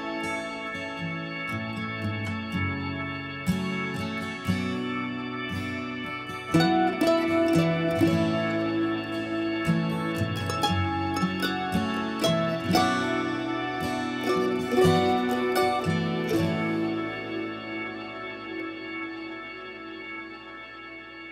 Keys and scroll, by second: 6.2-7.4 typing, 7.5 Return, 11.0 ctrl+v, 11.2 Return.